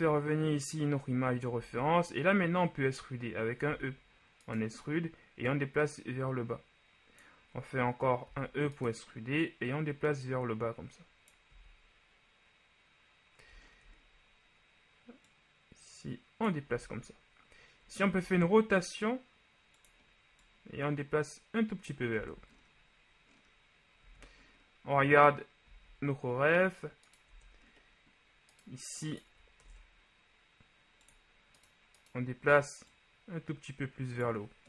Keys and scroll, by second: 3.7 e, 8.4 e, 11.7 z, 17.1 z, 18.3 r, 22.4 Tab, 24.1 z, 27.4 Tab, 29.8 ctrl+Tab.